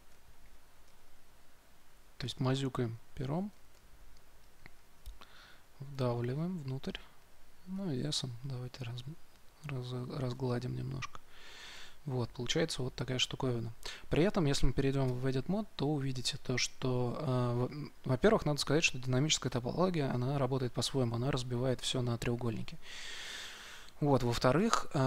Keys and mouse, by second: 7.7 s, 11.8-15.0 middle drag, 15.0 Tab, 18.5-25.0 middle drag.